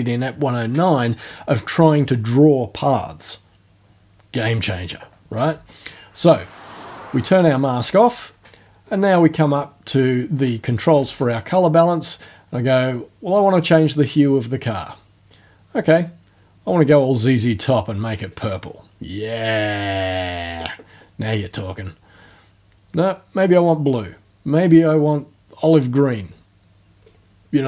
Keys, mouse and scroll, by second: 7.0 click, 8.2-8.9 ctrl+alt+scroll up 2, 9.0-9.5 ctrl+alt+scroll up 2, 9.8-10.2 ctrl+alt+scroll down 4, 13.7-18.5 drag, 21.8-27.2 drag.